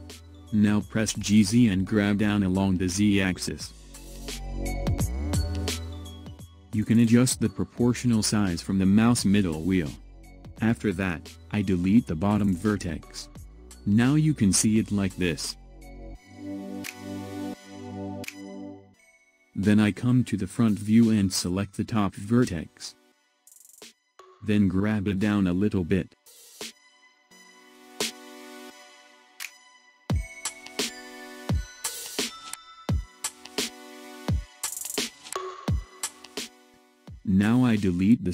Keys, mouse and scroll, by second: 2.5 g, 10.6 x, 13.8-16.9 middle drag, 20.0 KP_1, 23.1 click, 24.7 g, 30.5-33.5 middle drag, 34.5 click, 37.4 x.